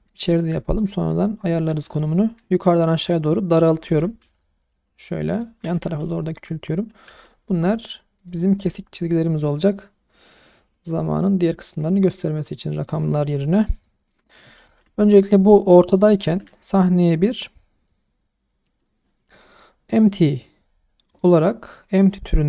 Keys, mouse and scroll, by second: 0.1-0.8 middle drag, 1.7 s, 3.0 z, 3.5 right click, 3.9 s, 4.2 y, 5.3 click, 5.6 s, 5.8 x, 6.3 click, 7.1 s, 7.5 y, 8.2 click, 9.4 click, 13.6 shift+scroll up 1, 13.8 shift+middle drag, 14.6 ctrl+z, 15.4 click, 16.2 shift+a.